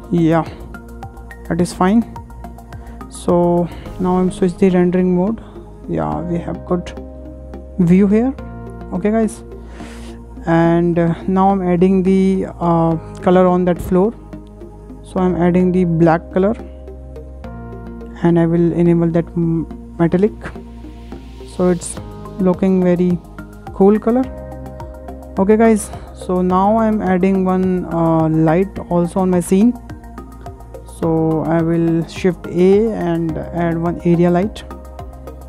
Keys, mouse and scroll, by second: 0.0 scroll down 5, 0.3-0.9 middle drag, 0.9-1.2 scroll up 3, 1.2 shift+middle click, 1.4 shift+scroll down 2, 1.7 middle click, 2.0-2.4 scroll up 3, 2.4-2.8 scroll down 3, 2.8-4.1 middle drag, 4.1 click, 4.8-5.2 drag, 5.2-5.6 scroll up 1, 5.6-6.6 shift+middle drag, 6.6 scroll up 1, 6.9-9.9 shift+middle drag, 9.9 click, 10.6-11.5 scroll down 3, 11.5 click, 13.4 click, 14.4-15.7 drag, 19.1 click, 21.4-21.9 scroll up 4, 21.9-22.4 shift+middle drag, 22.4-22.7 scroll down 2, 22.7-23.7 shift+middle drag, 23.7 scroll up 2, 24.3 KP_0, 24.6 KP_0, 26.4 KP_0, 26.8 KP_0, 27.4-28.0 scroll down 8, 28.0-28.7 middle drag, 28.7 scroll up 4, 29.0-29.6 shift+middle drag, 29.6 scroll down 2, 29.7-30.8 shift+middle drag, 30.8 shift+a, 34.1-34.6 scroll down 1, 34.6-35.4 middle drag.